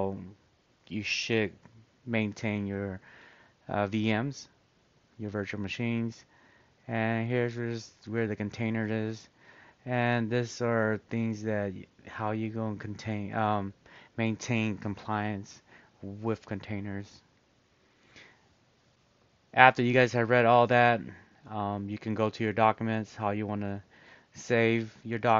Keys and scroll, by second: 4.7-5.4 scroll, 7.0 scroll, 9.5 scroll, 11.6 scroll.